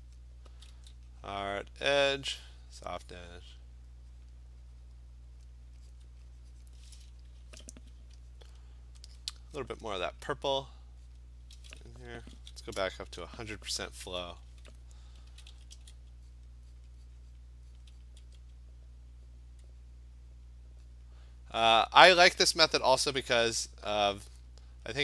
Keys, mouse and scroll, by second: 0.2 click, 0.5 [, 0.7 [, 1.5 click, 2.1 click, 3.0 click, 3.5 click, 4.2 click, 5.1 click, 5.4 click, 5.9 click, 6.6 click, 8.5-9.2 alt+click, 9.1 click, 10.4 click, 10.6 click, 11.1 click, 13.5 ), 15.3 [, 15.5 [, 15.7 [, 16.3 click, 16.8 click, 17.2 click, 17.4 click, 17.8 click, 18.0 click, 18.2 ], 20.0 click, 20.4 click, 20.9 click, 21.2 click, 21.7 click, 24.2 alt+click, 24.7 click.